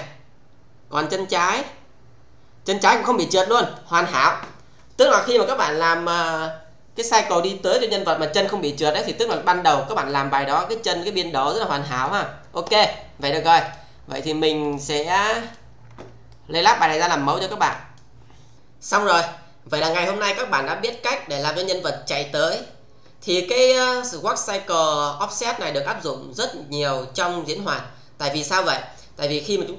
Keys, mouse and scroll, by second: 13.6 click, 14.6 click, 16.2-16.9 alt+middle click, 17.7 click, 18.5 Tab.